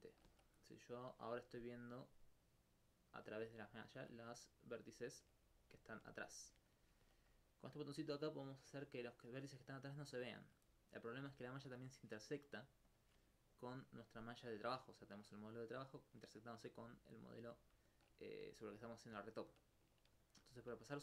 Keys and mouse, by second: 1.4 alt+click, 1.8 alt+click, 3.6 alt+click, 3.8 alt+click, 4.9 alt+click, 5.8 alt+click, 5.8 alt+click, 6.4 alt+click, 8.2 click, 9.8 alt+click, 9.9 alt+click, 10.9 alt+click, 11.4 alt+click, 12.9 alt+click, 14.0 alt+click.